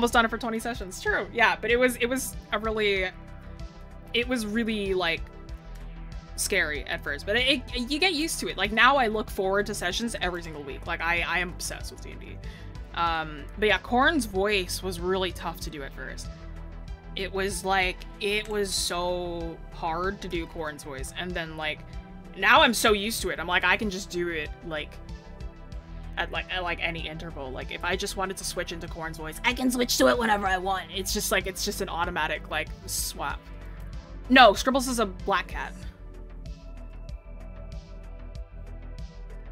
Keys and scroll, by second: 5.0 scroll down 1, 8.1 scroll up 1, 9.1 scroll up 1.